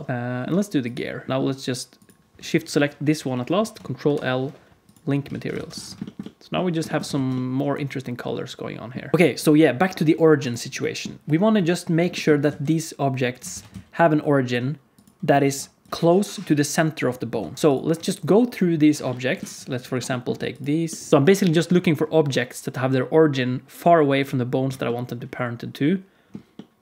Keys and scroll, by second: 4.0 ctrl+l, 5.2 alt+a, 5.5 ctrl+s, 7.1 alt+shift+z, 9.1 ctrl+s, 11.5 KP_Decimal, 12.4 alt+z, 13.5 ctrl+s, 13.6 z, 15.3 ctrl+Tab, 17.3 ctrl+Tab, 17.7 alt+z, 17.7 ctrl+s.